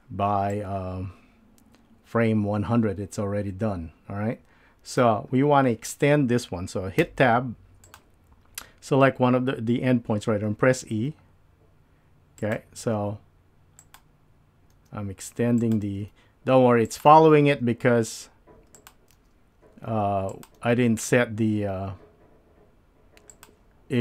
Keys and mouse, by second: 0.6-5.0 drag, 7.0 Tab, 7.8 click, 10.8 e, 13.1 e, 14.7 e, 16.0 e, 17.2 e, 19.3 e, 20.7 e.